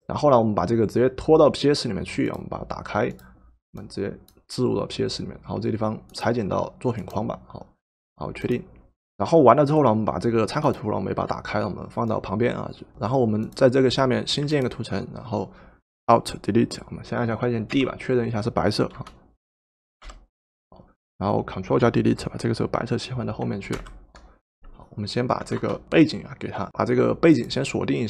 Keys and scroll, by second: 17.8 d, 20.0 d, 23.7 ctrl+Delete, 25.4 v.